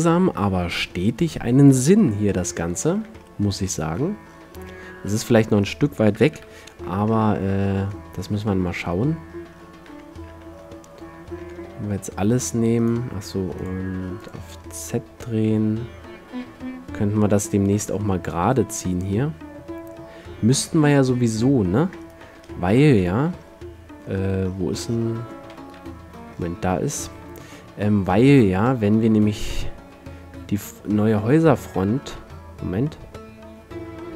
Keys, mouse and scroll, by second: 0.7 middle click, 2.1 KP_Decimal, 3.2 a, 5.8 middle click, 6.5 KP_7, 7.6 middle click, 10.1 a, 10.5 a, 11.6 r, 13.1-14.0 drag, 14.9 r, 15.0-15.6 drag, 22.3-23.6 drag, 22.3 z, 23.5 z, 25.1 middle click, 25.9 KP_5, 26.1-27.2 middle drag, 27.2 r.